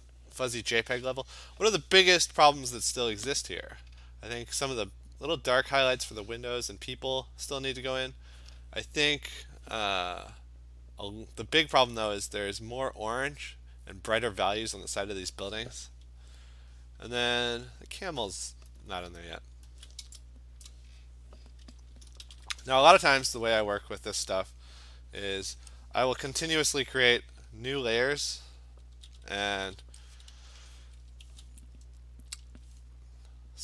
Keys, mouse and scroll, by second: 17.2-18.7 scroll, 18.7-20.0 scroll, 23.5 ctrl+shift+n, 23.5 Return, 23.5 click, 29.0-31.3 typing, 32.5 click.